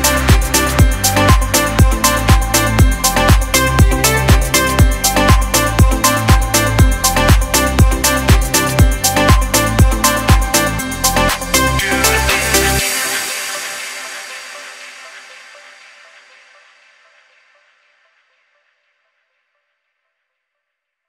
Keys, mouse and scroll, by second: 0.9 click, 0.9 scroll up 1, 3.6-9.0 drag, 6.3 typing, 9.1-12.4 drag, 9.1 typing, 12.4-14.4 alt+shift+drag, 15.3 alt+scroll down 1, 15.3 typing, 16.1 click, 16.4 space, 16.5 click, 16.9 space, 17.4 click, 17.8 alt+scroll down 1, 18.7-20.9 typing, 18.8 click, 19.9 click, 20.8 click.